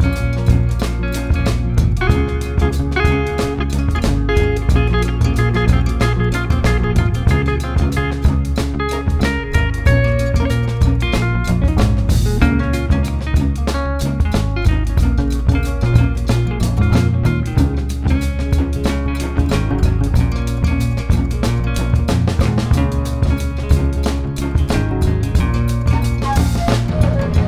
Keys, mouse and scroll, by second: 2.2 click, 3.1 ctrl+z, 4.0 click, 4.4 middle click, 4.7 click, 5.0 middle click, 5.7 click, 6.4 middle click, 6.8-7.8 drag, 7.8 middle click, 8.3 click, 9.2 middle click, 9.5 click, 10.4 middle click, 10.9 ctrl+z, 11.1 click, 11.6 ctrl+z, 11.8 click, 12.1 middle click, 12.6 click, 13.2 middle click, 13.5 click, 13.9 middle click, 14.4 click, 14.5-16.2 middle drag, 16.2 shift+click, 16.9 middle click, 17.1 ctrl+z, 17.3 ctrl+z, 17.5 ctrl+z, 17.7 ctrl+z, 18.0 ctrl+z, 18.2 ctrl+z, 18.4 middle click, 19.4 scroll down 1, 19.5 middle click, 19.8-21.8 scroll up 2, 21.8 click, 22.2 click, 22.9 click, 24.5 click, 25.2 ctrl+z, 26.4 click.